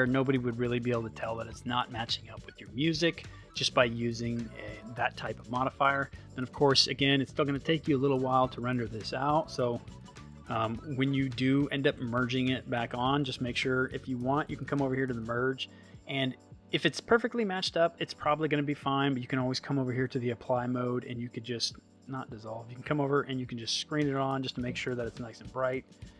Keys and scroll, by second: 5.8 space.